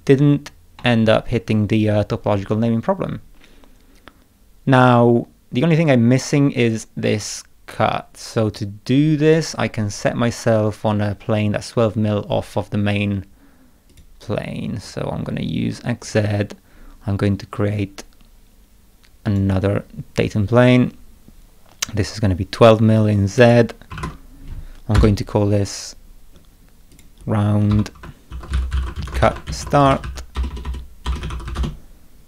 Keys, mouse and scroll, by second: 0.1 scroll up 2, 0.8 middle click, 13.9 click, 14.4 scroll up 2, 14.8-15.3 scroll down 4, 16.0 click, 19.2 click, 23.3 click, 23.6-24.4 typing, 24.9 Return, 26.3 middle click, 26.9 click, 27.7 F2, 28.0-31.9 typing.